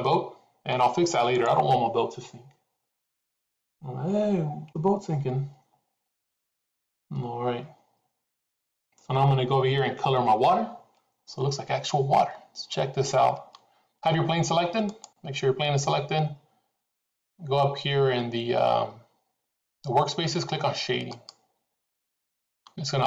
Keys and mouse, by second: 1.4 click.